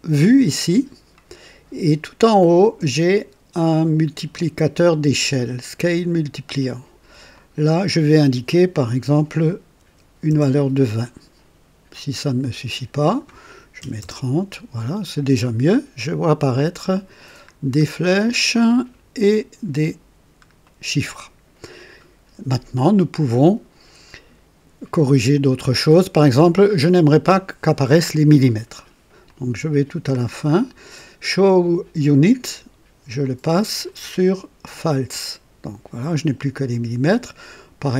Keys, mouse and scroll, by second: 4.7 click, 7.3 click, 9.7 KP_2, 10.2 KP_0, 12.6 click, 13.8-14.1 typing, 16.7 scroll up 2, 20.5-21.6 middle drag, 29.2-30.2 drag, 33.1 click, 33.8 click, 34.7 click, 37.7 click.